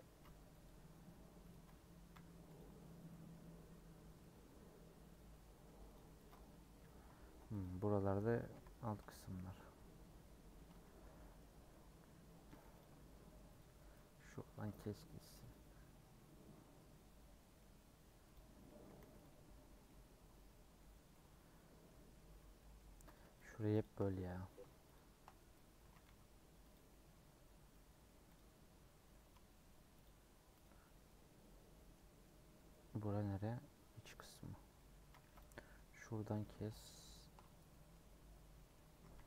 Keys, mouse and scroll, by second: 2.6 u, 4.2 middle click, 4.8-5.9 scroll down 1, 5.9 click, 6.3 click, 7.2 3, 7.6 click, 8.5 l, 9.4-11.1 middle drag, 11.1 scroll up 2, 11.3-12.6 middle drag, 12.6 2, 12.8 click, 13.6 click, 14.3 scroll down 1, 14.5 a, 15.5 u, 17.4 middle click, 18.3 click, 19.0 3, 19.2 click, 19.7 scroll down 2, 19.8-22.0 middle drag, 22.0 scroll up 1, 22.5 middle click, 23.1 click, 23.8 shift+click, 24.0 middle click, 24.9 shift+click, 25.8 a, 26.7 u, 27.8 middle click, 28.3 click, 28.6 middle click, 29.1 a, 30.0 click, 30.6 click, 31.0 middle click, 31.9-32.2 scroll down 3, 32.2-33.8 middle drag, 33.8 scroll up 1, 34.0-35.2 middle drag, 35.2 2, 35.4 click, 35.5-37.1 middle drag, 37.1 shift+click, 37.7 middle click, 38.0-38.5 scroll up 2, 38.5 middle click, 38.9 a.